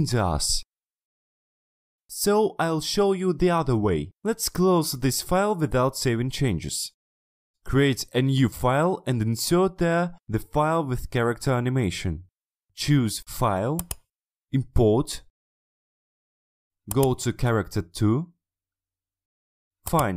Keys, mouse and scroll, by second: 7.7 click, 8.0 click, 8.8 click, 13.8 click, 15.2-17.4 drag, 19.9 click.